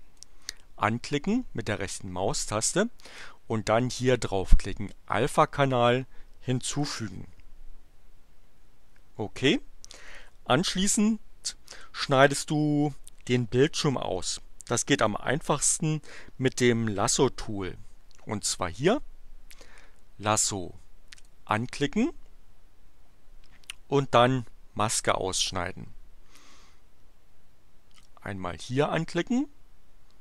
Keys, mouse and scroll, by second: 0.2 right click, 6.8 click, 21.1 click, 28.0 click.